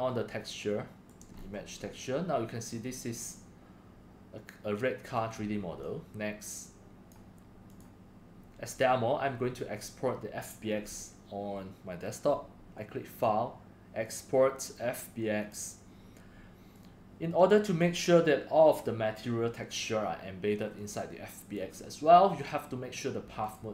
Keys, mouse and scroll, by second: 0.1-0.6 middle drag, 0.6-1.0 drag, 1.3 middle click, 1.3-1.9 scroll, 2.8 scroll, 2.8 middle click, 2.8 scroll up 1, 3.3 middle drag, 5.5 middle drag, 5.8 drag, 6.1 drag, 6.6 click, 6.8 click, 7.1 click, 13.1 click, 14.0 click, 15.4 click, 16.9-17.3 drag, 17.5 click, 20.7-21.1 drag, 21.3 drag, 23.4 click.